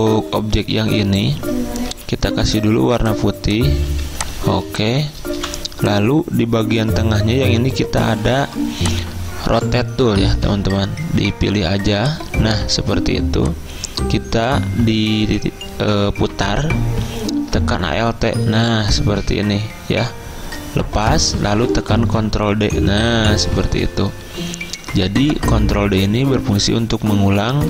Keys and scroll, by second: 2.0 d, 4.0 z, 5.2-5.9 typing, 22.2 ctrl+d, 22.8 ctrl+d, 23.0 ctrl+d, 23.1 ctrl+d.